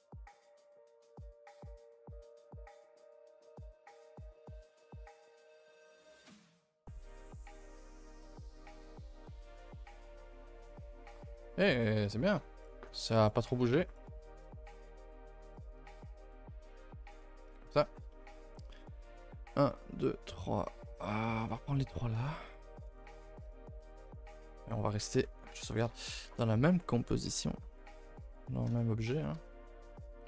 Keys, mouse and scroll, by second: 0.4 middle click, 0.7 a, 0.9 a, 2.4 l, 2.7 middle click, 5.2 a, 5.4-5.8 middle drag, 5.8 scroll down 3, 6.1-6.5 middle drag, 6.5 a, 6.6 a, 6.8 middle click, 7.1 ctrl+s, 7.5 click, 7.8 right click, 8.4 a, 8.5 a, 8.8 KP_0, 12.0 click, 12.6 click, 13.2 click, 13.8 click, 21.4 click, 22.2 click, 23.0 click, 23.4 click, 24.0 click.